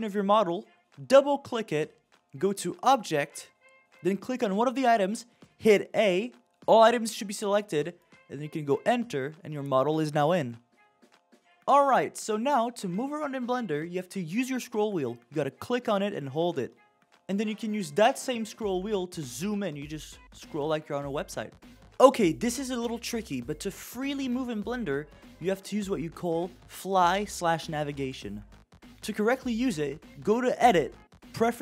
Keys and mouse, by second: 13.3-16.1 middle drag, 18.7-20.0 shift+middle drag, 21.8 shift+f, 30.7-31.6 drag.